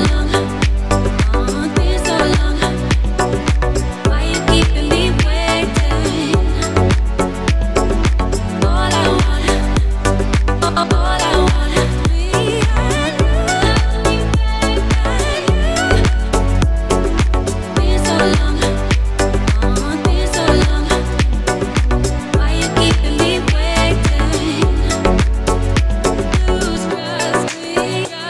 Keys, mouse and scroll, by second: 0.4 g, 2.4 click, 3.0 r, 4.1 click, 5.1 i, 8.4 shift+d, 9.7 click, 10.2 g, 10.6 click, 11.5 click, 12.0 space, 19.4 space, 20.7 click, 21.4 shift+d, 23.8 click, 24.5 click, 25.1 shift+d, 25.8 click, 26.5 click, 27.1 shift+d, 28.1 click.